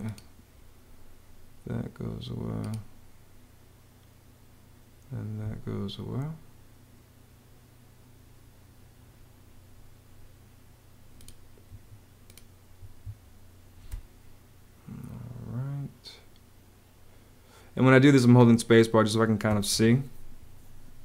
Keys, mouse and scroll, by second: 4.9 Escape, 11.5 Escape, 13.7 space.